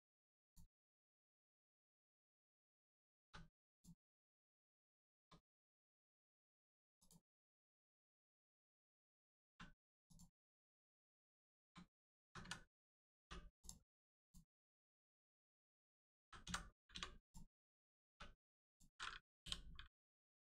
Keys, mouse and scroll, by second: 0.4 click, 1.0 scroll down 1, 1.8 shift+middle click, 3.2 middle click, 3.6 click, 5.0 shift+middle click, 5.4 scroll down 1, 5.8 middle click, 6.9 click, 7.6 shift+middle click, 9.4 1, 10.0 click, 11.2 shift+click, 13.6 click, 15.4 shift+click, 16.2 s, 16.4 x, 16.8 0, 17.2 click, 18.0 3, 18.6 click, 19.4 l.